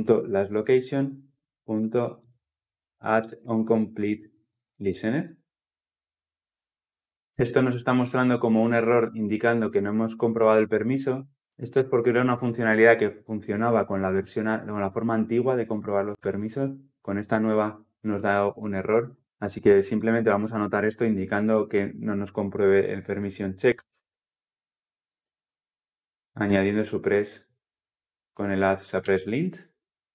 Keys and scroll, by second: 19.2 ctrl+z, 21.4 alt+Return.